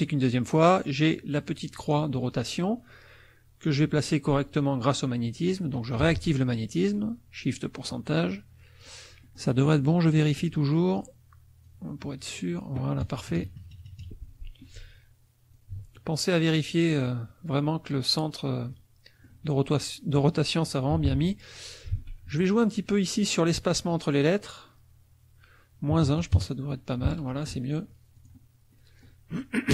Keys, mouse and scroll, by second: 2.1-5.7 drag, 7.5-9.0 drag, 9.2 middle click, 9.5-10.5 drag, 11.6-12.7 drag, 13.0 KP_Subtract, 15.5-17.1 ctrl+drag, 18.7 click, 20.9 t, 21.9 ctrl+a, 23.9 click, 25.9 KP_Subtract, 26.1 KP_1, 26.3 KP_Enter, 28.1 click, 28.7 middle click, 28.8 click.